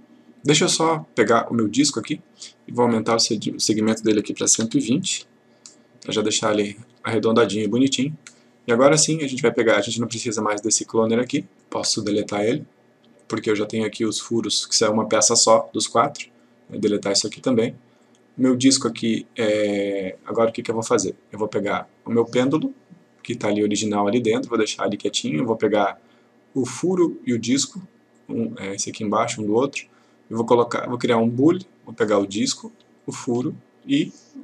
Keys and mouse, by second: 2.1 click, 4.5 typing, 5.7 click, 10.6 click, 13.1 Delete, 14.1 click, 17.0 click, 18.1 click, 23.6 click, 25.4-26.0 click, 28.2-28.8 click, 33.0 shift+click.